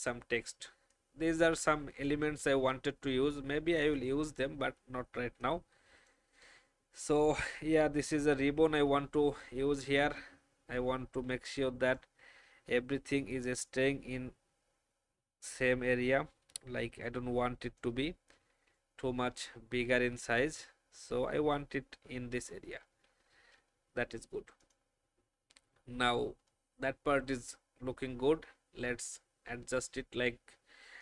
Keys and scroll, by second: 18.6 alt+shift+Down, 19.8 Down, 21.7 shift+Down, 23.1 shift+Up.